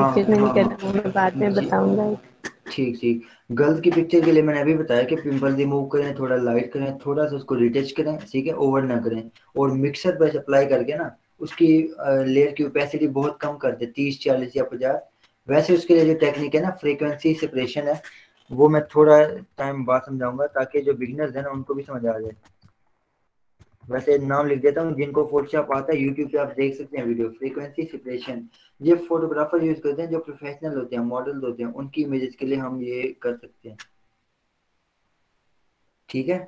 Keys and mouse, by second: 19.1 click, 20.3-25.9 typing.